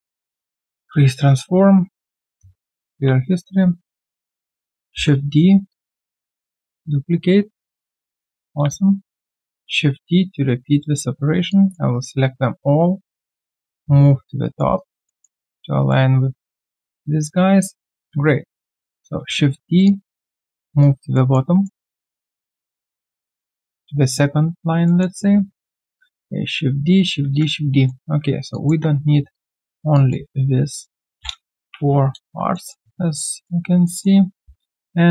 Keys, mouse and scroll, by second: 0.9 alt+middle click, 1.2 alt+right click, 2.6 alt+right click, 10.4 typing, 12.3 scroll down 1, 14.7 alt+right click, 15.0 alt+middle click, 15.4 alt+right click, 15.9 alt+middle click, 17.6 alt+right click, 19.2 d, 20.8 alt+right click, 21.1 alt+middle click, 21.4 alt+right click, 21.9 alt+middle click, 24.8 alt+middle click, 25.5 alt+right click, 27.2 typing, 27.8 alt+middle click, 29.3 shift+click, 31.6 Delete, 32.5 alt+middle click, 33.8 alt+middle click.